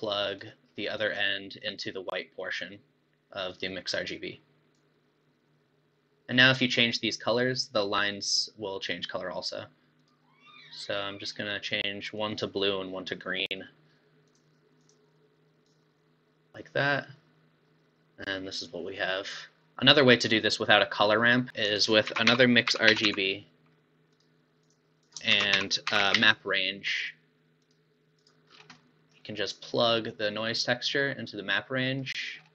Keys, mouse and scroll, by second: 1.3-2.1 scroll down 1, 4.7 click, 10.0 click, 14.2-14.9 drag, 16.8-19.7 middle drag, 21.0-21.6 scroll down 9, 21.6 scroll up 6, 21.7 click, 22.2 shift+a, 25.0 click, 25.4 shift+a, 28.6 scroll down 2, 28.8-30.6 middle drag, 30.6 click, 32.2 middle click, 32.4-32.5 scroll up 7.